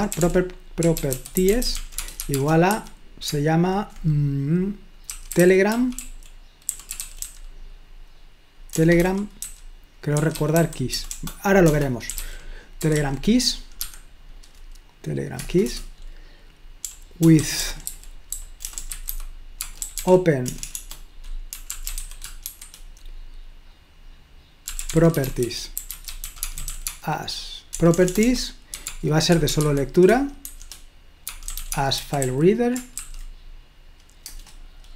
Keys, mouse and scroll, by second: 0.0-3.3 typing, 4.9-7.7 typing, 8.8-13.8 typing, 15.4 Return, 15.6 Return, 16.6-22.6 typing, 24.5-33.0 typing, 34.3 Return.